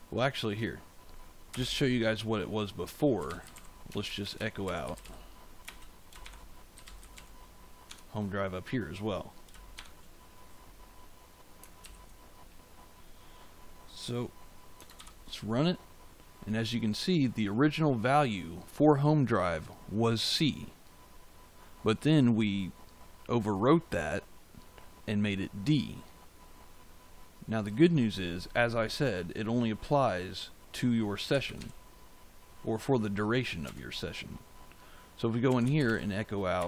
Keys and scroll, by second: 1.4 Return, 2.9-7.6 typing, 7.8 Tab, 9.7 shift+5, 11.7 ctrl+s, 31.0-32.0 typing, 33.6 Return, 35.2-36.6 typing.